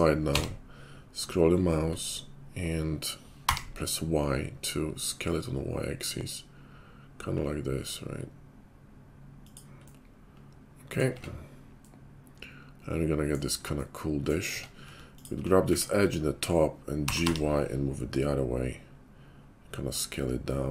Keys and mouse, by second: 0.2 g, 11.1 Tab, 14.4 Tab, 15.1 alt+click, 15.6 `, 16.9 g, 17.4-20.7 middle drag.